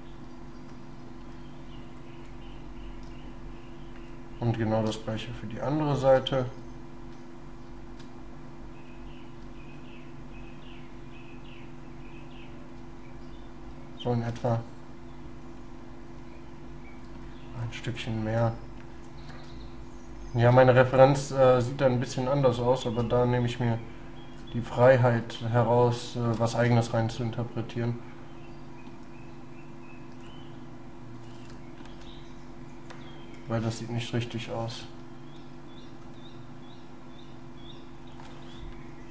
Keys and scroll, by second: 5.1 shift+space, 7.2 shift+space, 9.4 shift+space, 19.4 shift+space, 33.7 ctrl+z, 34.8 ctrl+y.